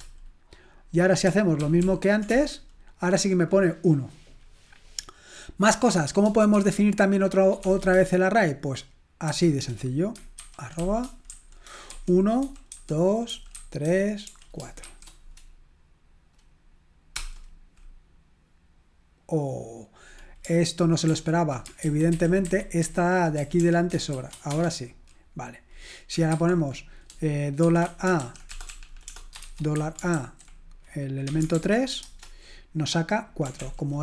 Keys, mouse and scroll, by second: 1.6 ctrl+p, 1.9 ctrl+p, 2.3 Return, 9.3 typing, 10.4-14.8 typing, 21.1 ctrl+p, 21.8 alt+b, 22.1 alt+b, 22.5 alt+b, 22.9 alt+b, 23.4 BackSpace, 23.6 BackSpace, 24.1 shift+9, 24.5 Return, 28.2-28.5 typing, 29.6-32.0 typing, 33.6 ctrl+l.